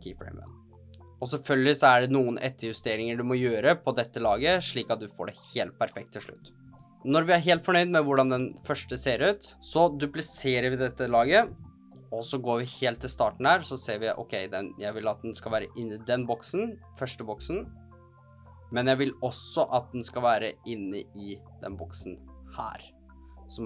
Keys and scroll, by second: 8.3 space, 11.4 super+d.